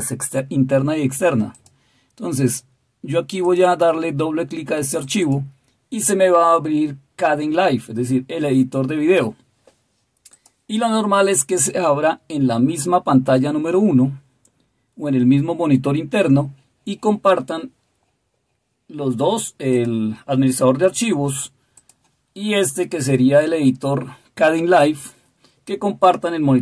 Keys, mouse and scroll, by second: 1.5 click, 3.4 click, 4.9 click, 5.3 right click.